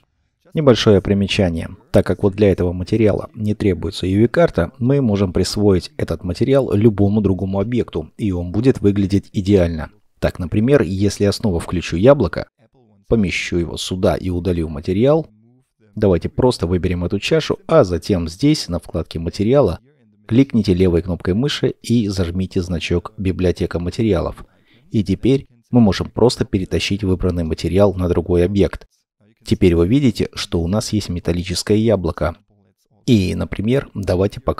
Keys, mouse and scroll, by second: 14.0 shift+middle click, 29.4 scroll up 1, 30.5 middle click, 31.4 scroll down 1, 33.7 double click.